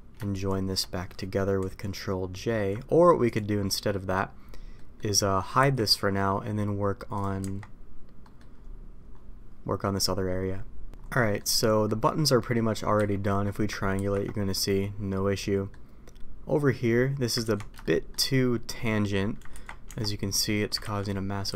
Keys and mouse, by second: 3.2 click, 3.6 middle click, 4.7 middle click, 5.5 h, 7.3 Tab, 8.2 middle click, 11.1 middle click, 11.8 middle click, 12.3 middle click, 12.9 a, 13.2 middle click, 13.9 ctrl+t, 15.3 middle click, 17.4 ctrl+z, 17.8-18.1 shift+middle drag, 19.5 ctrl+t, 19.8 Tab, 21.0 ctrl+z.